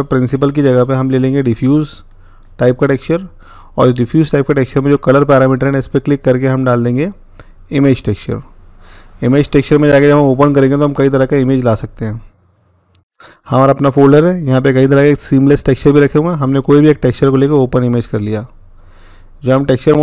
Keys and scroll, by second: 12.8 Return.